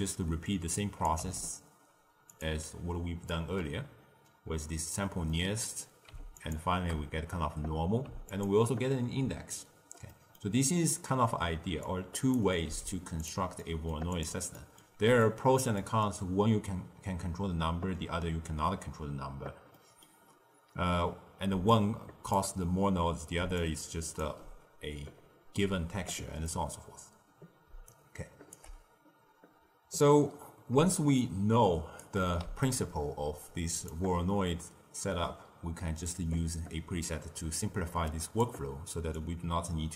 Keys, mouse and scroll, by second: 0.4 click, 1.1 g, 3.2 drag, 5.2-6.3 middle drag, 6.3 ctrl+shift+click, 8.3 ctrl+shift+click, 10.0 middle click, 10.5-11.2 scroll down 3, 11.2-11.8 scroll down 1, 11.8 click, 12.6 g, 13.5-14.0 middle drag, 14.0 click, 14.5-16.0 middle drag, 16.0-19.1 scroll up 1, 19.7 middle click, 20.2-21.5 scroll down 1, 21.5 d, 21.7 click, 22.3 d, 23.3 d, 23.5-24.1 drag, 24.1 d, 26.4 middle click, 26.8-27.6 scroll down 4, 27.6 d, 27.8 right click, 28.5 d, 30.8 shift+right click, 32.3 g, 36.0 click, 39.1 click.